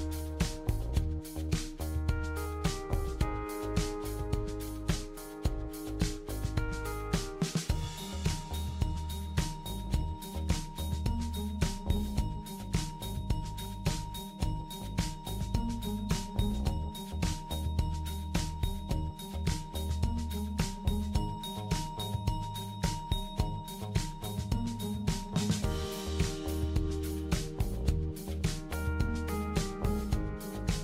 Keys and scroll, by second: 4.0 BackSpace.